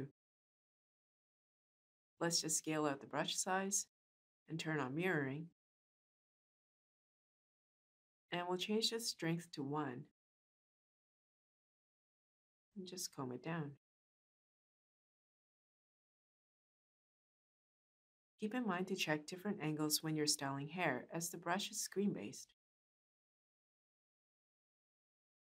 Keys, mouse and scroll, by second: 2.2-3.5 shift+drag, 21.0-22.9 shift+drag.